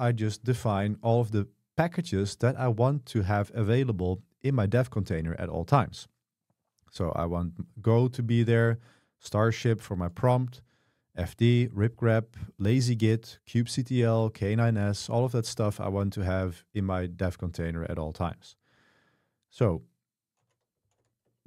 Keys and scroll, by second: 0.0 k, 7.1-9.5 typing, 10.6-12.1 typing, 13.1 j, 14.0 j, 17.2 k, 20.6-21.4 typing.